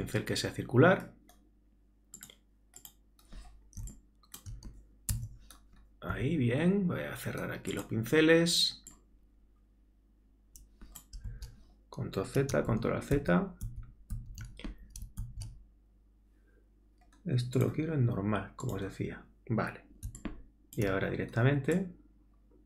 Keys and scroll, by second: 5.1 ctrl+alt+Tab, 11.3 super+z, 12.7 alt+super+z.